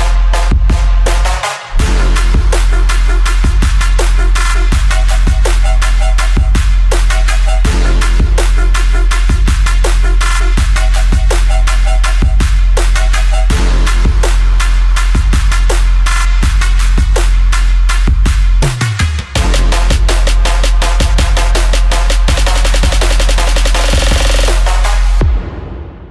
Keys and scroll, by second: 18.4-19.2 typing, 23.1-23.9 typing.